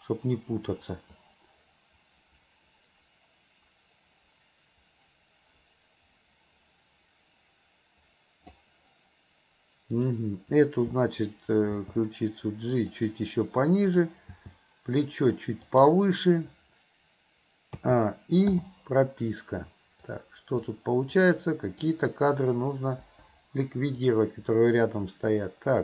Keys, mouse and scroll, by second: 1.3-8.7 drag, 9.9 click, 11.9 g, 14.0 click, 14.4 g, 17.9 a, 18.6 i, 20.2 click, 21.1-21.8 drag, 23.1 Delete, 24.1-25.8 drag.